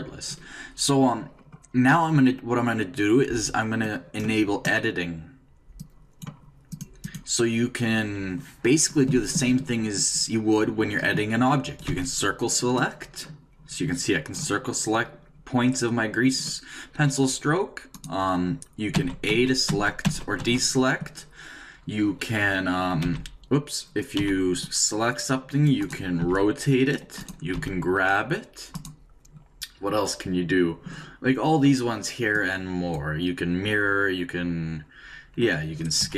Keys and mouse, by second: 3.5 middle click, 3.8-9.0 drag, 11.8 c, 18.0-20.0 right drag, 19.0-20.4 typing, 23.0 g, 24.2 c, 26.2-28.5 right drag, 26.2 r, 27.5 g, 32.3-34.1 drag, 36.0 s.